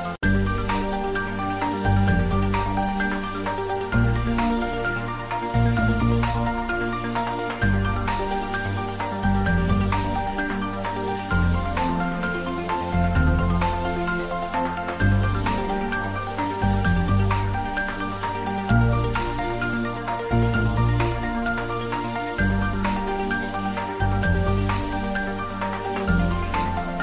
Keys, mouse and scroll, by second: 0.0 3, 0.1 click, 1.2 i, 2.9 click, 3.5 ctrl+z, 3.8 s, 4.4 click, 4.8 s, 5.1 click, 5.4 ctrl+z, 6.8 click, 8.4 s, 10.5 click, 11.4 ctrl+middle click, 12.2 e, 14.5 click, 14.6 s, 14.9 click, 15.1 ctrl+z, 15.8 s, 16.6 click, 16.8 e, 17.5 click, 18.1 e, 19.0 click, 19.1 s, 20.8 click, 20.9 Tab, 21.2 ctrl+middle click, 21.8-23.0 middle drag, 23.3 Tab, 24.0 ctrl+middle click, 24.5 click, 24.7 ctrl+middle click, 25.4 shift+a, 25.9 click, 26.5 ctrl+z.